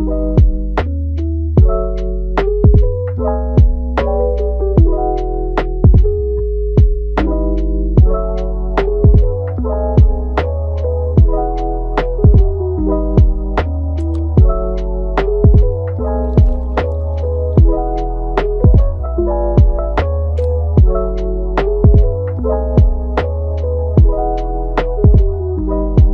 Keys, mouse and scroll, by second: 1.6 middle click, 2.1-3.5 drag, 3.5 middle click, 4.2 click, 5.2-6.3 middle drag, 6.3-7.4 scroll up 1, 7.4 click, 8.2 middle click, 9.0 click, 9.8 scroll down 2, 10.0 middle click, 10.6 click, 11.5 scroll down 1, 11.6 middle click, 12.1 scroll up 2, 12.3-14.4 middle drag, 14.4-15.2 scroll up 1, 15.2 click, 15.8-16.4 scroll up 1, 16.4-17.6 shift+middle drag, 17.6-22.2 drag, 22.2-22.7 scroll down 1, 22.7-23.0 scroll up 1, 23.0 middle click, 24.0 click, 24.6 scroll up 3, 25.6 KP_3, 25.7 scroll down 2.